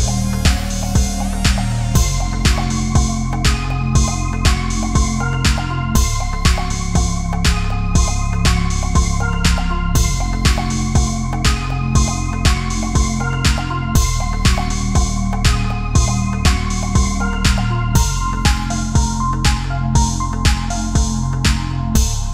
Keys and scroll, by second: 21.3 ctrl+-, 21.9 space.